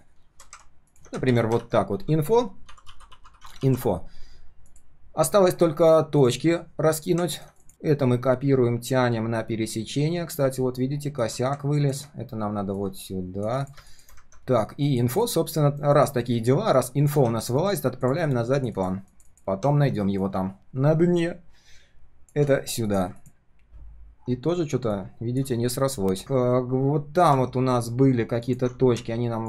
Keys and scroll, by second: 1.2 ctrl+g, 1.5 ctrl+r, 3.6 ctrl+s, 17.1 ctrl+z, 17.6 ctrl+shift+[, 25.5 ctrl+shift+3, 25.8 ctrl+shift+3, 26.0 ctrl+shift+4.